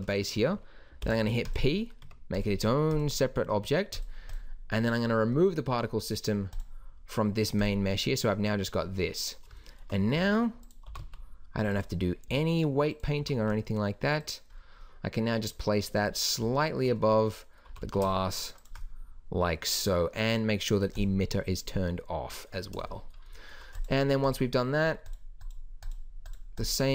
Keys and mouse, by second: 1.0 p, 2.0 Tab, 5.4 click, 6.5-7.6 drag, 8.7-9.6 drag, 10.2 s, 10.9 g, 12.3 s, 13.2 g, 17.7 g, 21.0-21.7 drag, 22.6-23.8 middle drag, 23.8 right click.